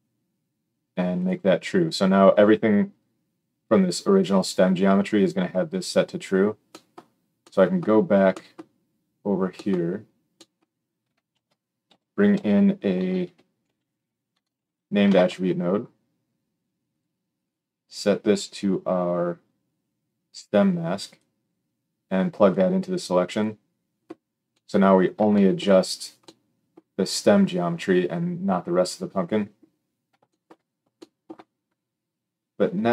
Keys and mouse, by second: 1.2-17.4 middle drag, 11.3 shift+a, 17.4-32.9 drag.